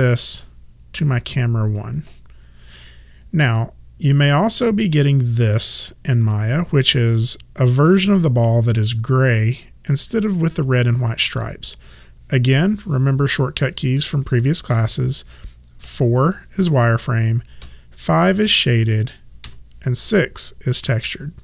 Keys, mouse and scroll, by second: 15.9 4, 17.7 5, 19.5 6.